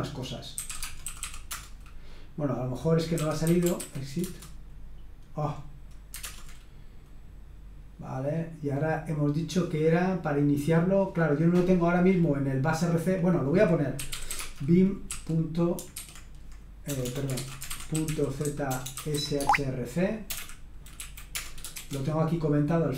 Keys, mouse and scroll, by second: 0.3-1.7 typing, 2.9-4.2 typing, 6.2 super+Return, 10.8 click, 12.1-13.2 scroll up 1, 13.3 click, 13.7-21.7 typing.